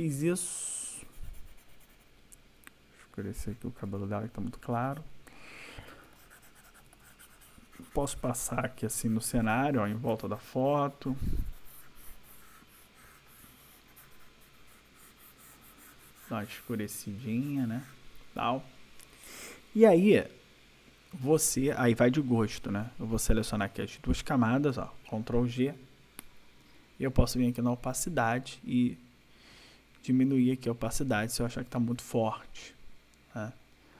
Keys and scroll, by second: 5.8 \, 25.6 ctrl+g.